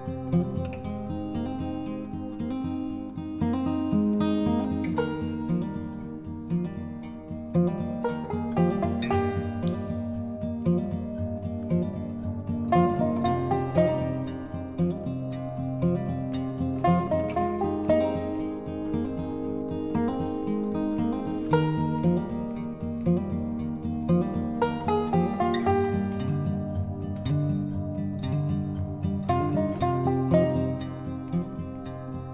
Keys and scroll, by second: 20.7 ctrl+i, 21.2 ctrl+=.